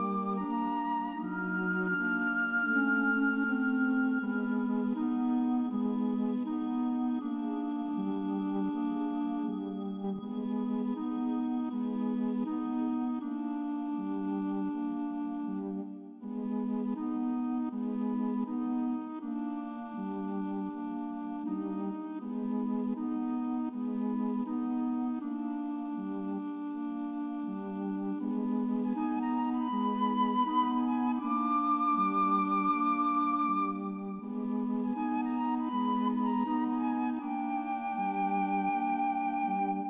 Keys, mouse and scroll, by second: 0.0 right click, 0.2 right click, 0.5 right click, 0.6 right click, 0.9 right click, 1.3 right click, 2.4 right click, 2.8 right click, 3.5 right click, 4.7 right click, 5.0 right click, 5.1 right click, 5.3 right click, 5.6 right click, 6.8 right click, 7.5 right click, 11.4 right click, 12.4 right click, 12.6 right click, 14.3 right click, 16.8 right click, 17.3 right click, 17.5 right click, 18.7 right click, 18.9 right click, 20.5 right click, 21.0 right click, 21.3 right click, 23.6 right click, 25.8 right click, 26.2 right click, 26.6 right click, 27.1 right click, 27.6 right click, 28.7 right click, 29.0 right click, 29.5 right click, 29.8 right click, 30.1 right click, 30.3 right click, 32.9 right click, 33.4 right click, 33.9 right click, 34.8 right click, 35.4 right click, 36.4 right click, 37.0 right click, 38.1 right click, 38.9 right click, 39.8 right click.